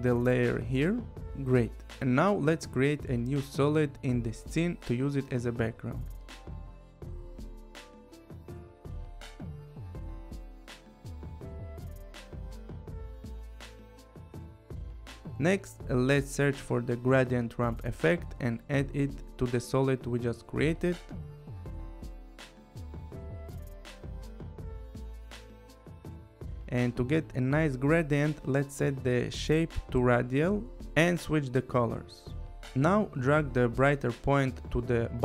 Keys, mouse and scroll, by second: 4.4 click, 6.5 right click, 8.1 click, 9.1-10.0 typing, 11.2 click, 13.1 click, 14.0 click, 14.6 click, 16.2 click, 19.4 click, 20.8 click, 21.3-22.7 typing, 23.9 click, 29.3 click, 31.7 click, 32.8 scroll, 34.0 click.